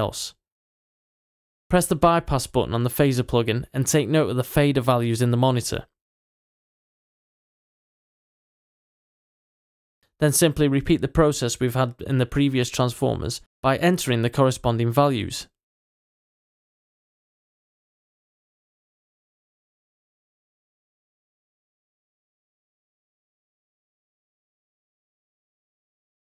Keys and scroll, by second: 22.2-24.6 typing, 23.5 Return.